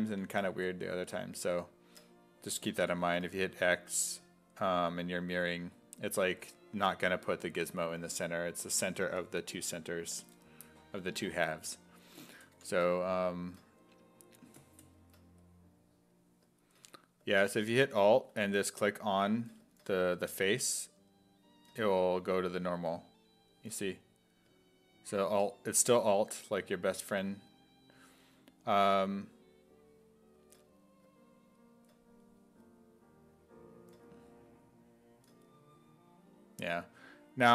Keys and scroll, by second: 2.8 x, 12.6 x.